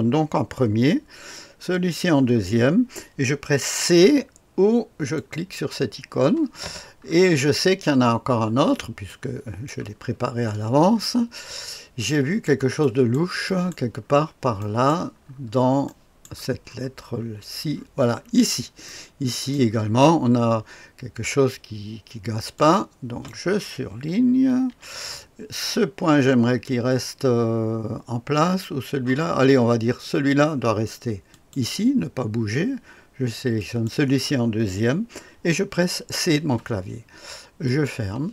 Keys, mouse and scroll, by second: 1.7 click, 5.1 click, 6.5-9.1 scroll down 1, 9.1-9.7 right drag, 10.4-11.9 scroll up 1, 11.9 scroll up 1, 12.1-13.7 right drag, 14.0 scroll down 2, 14.6 right click, 15.2-15.8 scroll down 2, 15.8-16.2 right drag, 16.6-18.8 scroll up 2, 18.8-19.5 right drag, 22.5-23.3 drag, 24.6 Delete, 31.3 click, 33.5 click, 36.0 c, 37.6 click.